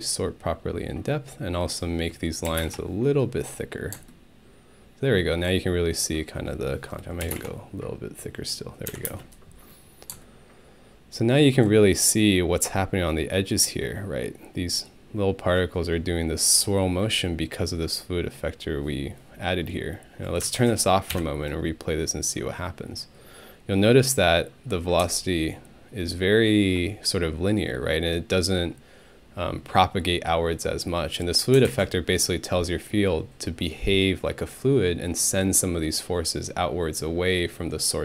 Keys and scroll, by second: 2.5 2, 2.6 Return, 7.2 3, 7.3 Return, 8.9 Home, 9.1 space, 21.1 ctrl+Home.